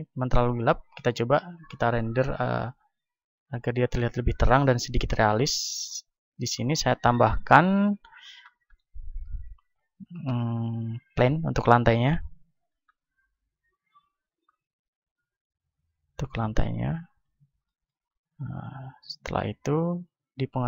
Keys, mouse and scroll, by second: 3.4 Escape, 5.6-10.4 drag, 10.1 shift+a, 12.0 s, 12.8-18.2 drag, 13.4 s, 18.2 middle click, 18.4 a, 20.5-20.6 drag.